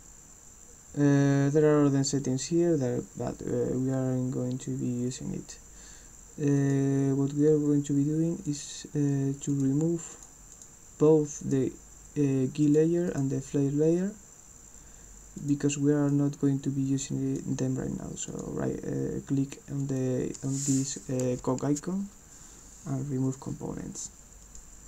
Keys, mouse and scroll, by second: 6.6 click, 8.5 click, 9.5 click, 10.1 click, 10.5 click, 11.4 click, 12.6 click, 13.1 click, 15.3 click, 16.1-17.3 drag, 18.3 click, 19.9 click, 20.4 click, 23.2 click, 24.5 click.